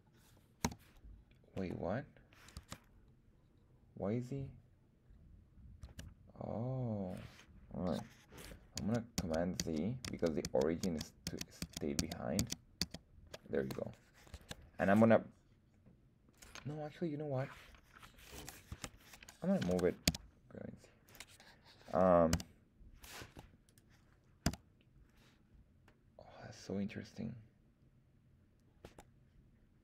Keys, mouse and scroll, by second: 0.6 r, 1.5 Escape, 2.5 Tab, 5.8 Tab, 8.7 super+z, 9.2 super+z, 9.6 super+z, 10.0 super+z, 10.4 super+z, 10.8 super+z, 11.2 super+z, 11.6 super+z, 11.9 super+z, 12.4 super+z, 12.8 super+z, 14.3 Tab, 18.7 Tab, 19.7 g, 20.0 z, 21.1 click, 22.3 s, 23.2 Escape, 23.6 right click, 24.4 s, 28.8 Escape.